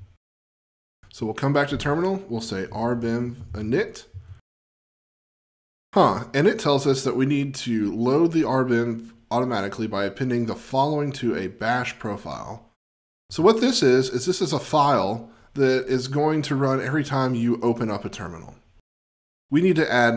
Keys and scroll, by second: 2.6 F20.